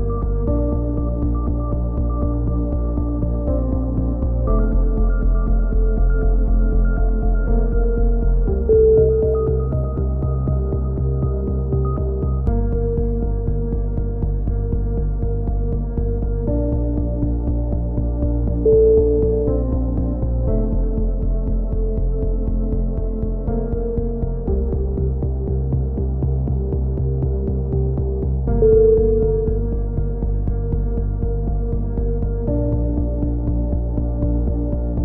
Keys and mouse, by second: 1.2 z, 1.4 z, 1.7 a, 1.9-2.5 drag, 2.7-3.5 right drag, 3.1 ctrl+l, 3.5 e, 4.0-4.5 drag, 4.7 s, 5.7-6.1 drag, 6.1 ctrl+z, 6.3-7.9 drag, 7.9 z, 8.3 KP_1, 8.6 z, 9.3 ctrl+KP_1, 10.7 KP_1, 12.0 ctrl+i, 12.3 h, 12.9-13.4 drag, 13.6-14.7 drag, 15.7 z, 17.3 alt+h, 17.5 z, 18.0 a, 18.3 click, 18.6 ctrl+l, 18.8 ctrl+i, 18.9 h, 19.1 z, 19.3-19.8 drag, 21.7 KP_1, 21.9 z, 22.8 b, 23.3-28.1 drag, 28.1 z, 28.4 z, 28.7-29.2 drag, 29.3-30.0 drag, 30.0 e, 30.4-31.0 drag, 32.1-32.7 drag.